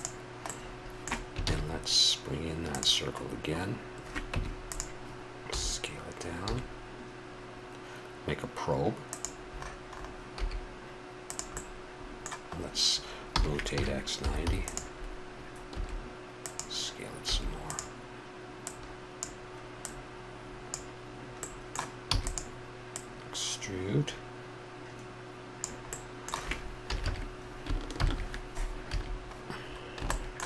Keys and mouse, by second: 1.4 shift+a, 4.3 Tab, 5.5 s, 6.4 s, 10.4 s, 12.0 middle click, 13.3 r, 15.8 s, 17.3 s, 18.6-20.7 drag, 21.4 middle click, 22.1 e, 22.9-25.3 drag, 25.9 middle click, 26.8 a, 27.0 a, 27.9 ctrl+n, 28.8 a.